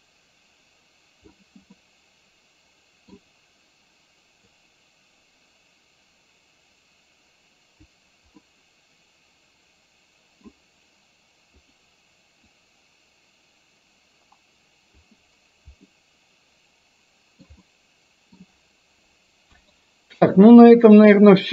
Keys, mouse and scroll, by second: 1.8-3.2 middle drag, 4.7-7.9 drag, 8.6-10.6 middle drag, 11.7 click, 12.7-15.2 drag, 15.9-17.4 middle drag, 17.6-18.4 middle drag, 19.6 KP_1.